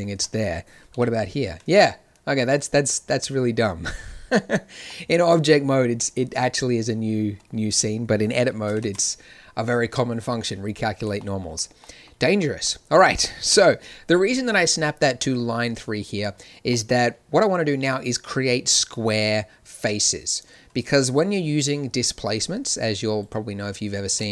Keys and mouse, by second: 0.1 Tab, 0.9 ctrl+n, 4.8 Tab, 8.7 ctrl+n, 13.4 KP_1, 23.1-24.1 drag, 24.1 ctrl+space.